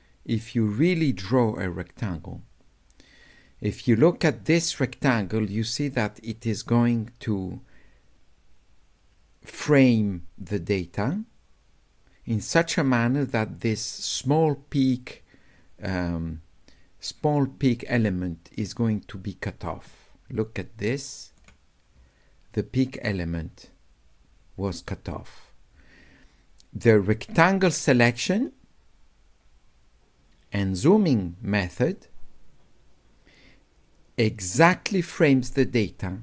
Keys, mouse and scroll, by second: 27.5-36.2 drag.